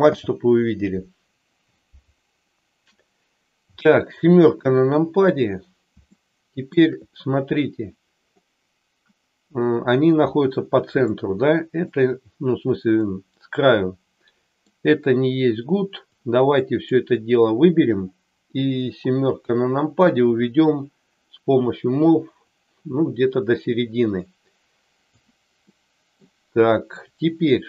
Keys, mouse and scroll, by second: 4.3 KP_7, 5.9 shift+middle click, 11.1 middle click, 12.9-14.7 middle drag, 16.2 click, 18.7 KP_7, 22.5-25.2 drag, 25.6 middle click.